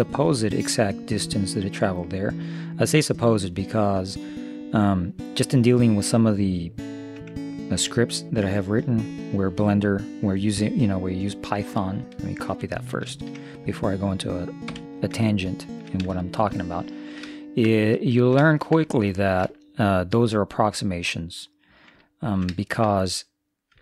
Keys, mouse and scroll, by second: 15.4-17.3 middle drag, 18.7-21.4 middle drag, 22.2-23.8 middle drag.